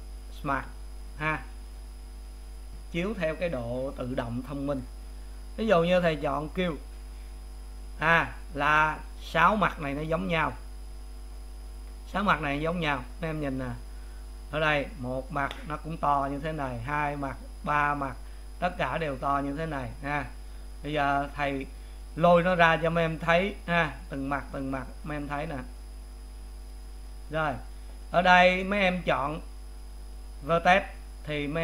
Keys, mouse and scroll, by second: 7.2 click, 9.6-12.9 middle drag, 12.9 click, 13.3-14.9 middle drag, 14.9 click, 16.9 click, 17.7 click, 19.2 click, 21.9 scroll down 6, 23.7 click, 24.0 click, 24.5 click, 25.0 click, 25.8 click, 26.7 click.